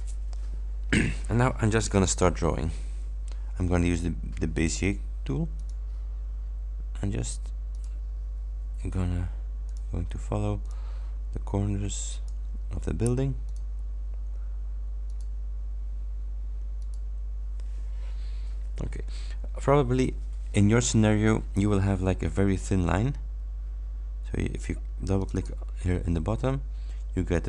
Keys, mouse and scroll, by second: 5.6 click, 7.8 click, 9.7 click, 10.7 click, 12.2 click, 13.5 click, 15.2 click, 16.9 click, 25.3 click.